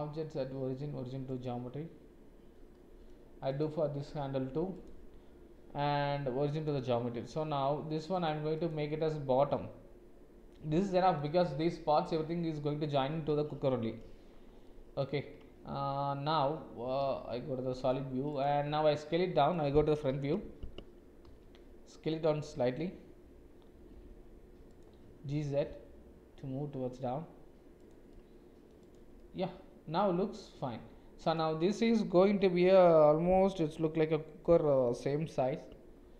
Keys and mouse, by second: 2.7 middle click, 3.5 click, 4.8-6.7 drag, 8.2 click, 9.5-11.2 drag, 14.7 click, 17.0 shift+z, 19.3 click, 20.1 KP_1, 21.2 s, 28.1 middle click, 28.3 click, 28.8 click, 29.2-30.3 middle drag.